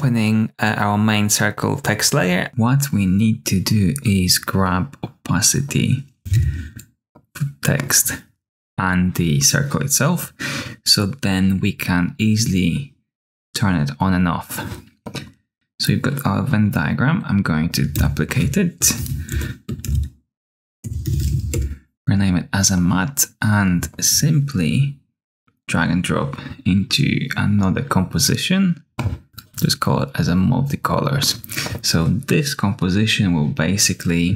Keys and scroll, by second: 6.3 t, 17.8 super+d, 18.7 Return, 19.0 Right, 19.2-21.7 typing, 29.2 typing.